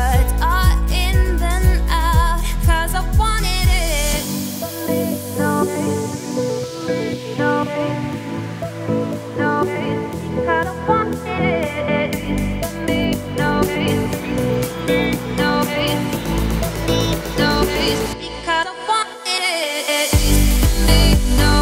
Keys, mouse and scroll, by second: 0.7 ctrl+scroll up 1, 0.8 ctrl+z, 1.2 ctrl+z, 1.5 Tab, 1.9 click, 2.1 scroll down 1, 2.2-3.7 middle drag, 3.7 z, 4.9-5.2 scroll up 4, 5.8 z, 6.7-7.0 scroll down 3, 7.0-7.5 middle drag, 7.5-8.1 scroll down 11, 8.1-12.3 middle drag, 12.3 shift+s, 14.8 shift+right click, 15.2 shift+a, 18.1 g, 20.9 `.